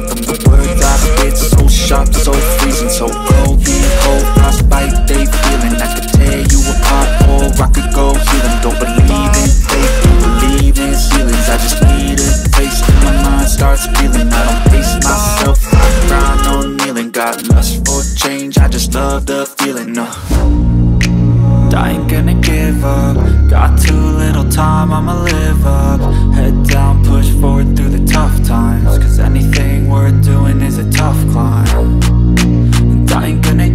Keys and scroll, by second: 10.2 ctrl+g, 12.1 ctrl+r, 14.0 Delete, 18.3 c, 19.5 shift+Page_Up, 20.3 F2, 23.4 F3, 26.4 F2, 27.2 Escape, 28.7 ctrl+r, 29.9 ctrl+r, 31.0 c, 31.1 e, 32.6 c, 32.7 e, 33.1 Escape.